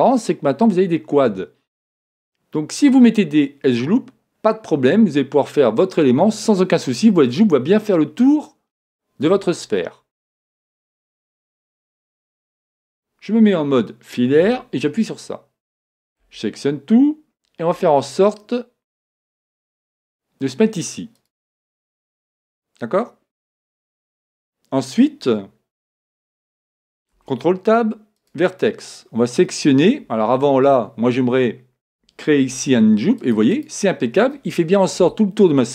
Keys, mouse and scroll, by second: 12.6 z, 14.4 a, 16.2 a, 17.8 s, 21.9 middle click, 22.4-23.8 scroll up 1, 23.8 scroll up 1, 24.0 middle click, 26.0 a, 33.8-35.4 ctrl+drag.